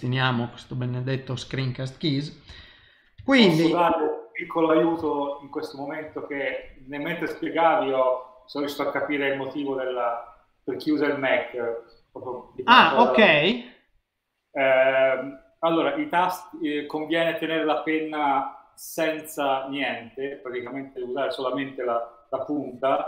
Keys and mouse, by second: 2.5 n, 3.3 shift+middle click, 5.0 ctrl+middle click.